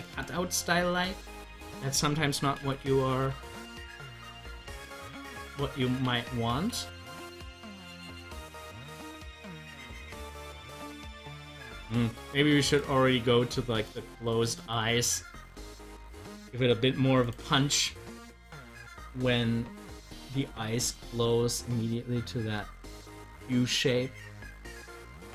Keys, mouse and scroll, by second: 0.6 scroll down 1, 8.9 typing, 11.2 typing, 15.1 scroll up 1, 18.0 scroll up 1.